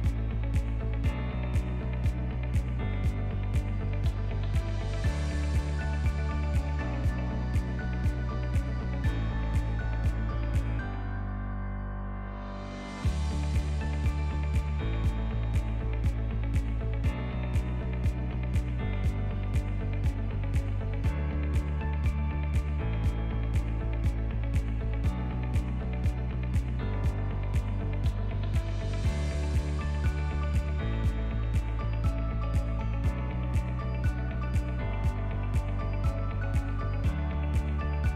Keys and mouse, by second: 2.1 shift+middle click, 2.6 ctrl+click, 3.5 g, 5.8 ctrl+click, 6.8 g, 8.8 Tab, 9.2 alt+z, 9.6 middle drag, 10.2 ctrl+middle click, 10.6-11.2 middle drag, 11.4 shift+middle click, 11.7-13.7 right drag, 14.3-14.8 middle drag, 14.9-15.8 right drag, 17.3-23.4 drag, 23.8-24.4 drag, 26.1-30.4 shift+drag, 32.0-33.0 drag, 33.4 Tab, 33.8 middle click, 34.8 ctrl+right click, 35.3 ctrl+r, 36.1 ctrl+z, 37.8 ctrl+right click.